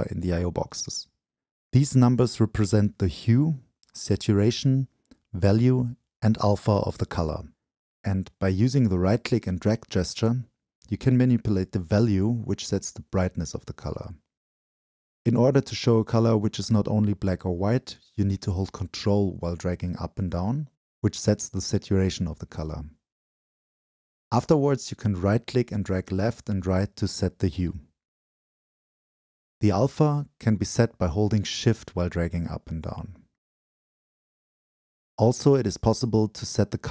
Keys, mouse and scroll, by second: 0.0 click, 10.7 right click, 11.9-12.4 scroll down 2, 18.3-19.8 scroll up 3, 19.8-20.3 scroll up 1, 20.3-21.8 scroll down 2, 21.8-22.9 scroll up 2, 22.9-23.7 scroll up 1, 23.7-24.9 scroll up 1, 23.8-24.9 middle drag, 25.9 middle click, 36.1-36.9 scroll up 1.